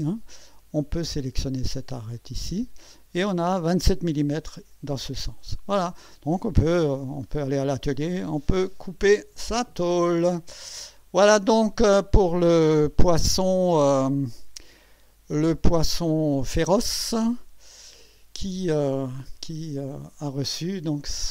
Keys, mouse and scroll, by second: 2.2 click, 10.9 click, 14.6 scroll down 2, 15.5 click, 15.8 space, 16.8 click, 17.6 click, 18.7-19.1 scroll down 2, 19.5-20.9 drag.